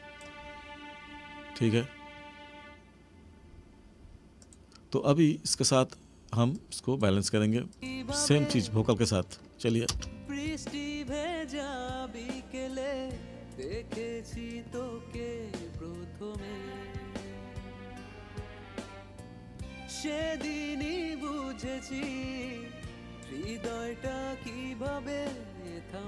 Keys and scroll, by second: 8.8 space.